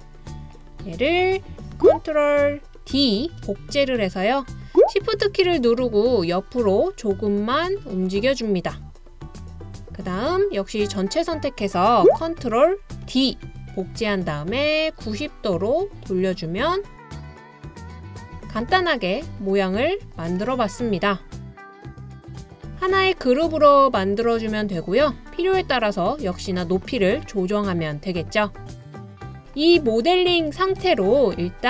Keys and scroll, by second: 1.8 ctrl+d, 3.2 super+d, 12.0 ctrl+d, 13.0 super+d.